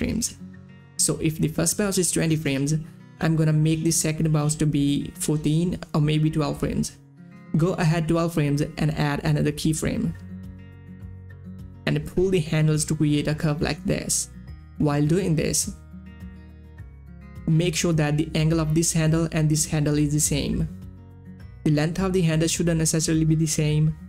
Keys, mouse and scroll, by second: 5.0 click, 5.8 shift+Page_Down, 7.1 Page_Down, 9.7 Page_Down, 10.0 click, 11.9-13.8 drag, 14.0-18.1 drag, 18.2 click, 21.7-24.0 drag.